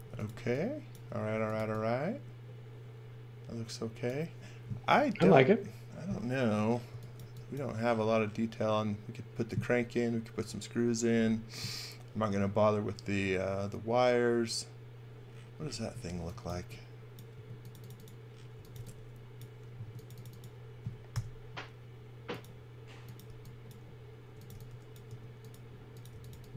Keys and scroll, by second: 0.0-1.6 typing, 6.9 x, 7.2 v, 16.1-19.8 typing, 21.1 i, 23.3 e, 24.5-26.5 typing.